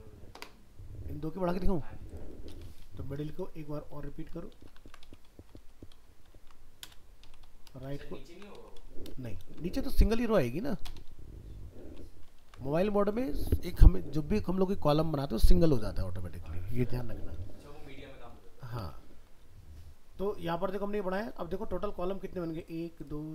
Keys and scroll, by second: 4.5 ctrl+shift+Left, 4.8 ctrl+c, 5.6 ctrl+Left, 6.3 ctrl+v, 7.8 ctrl+shift+Left, 8.3 ctrl+c, 9.4 ctrl+v.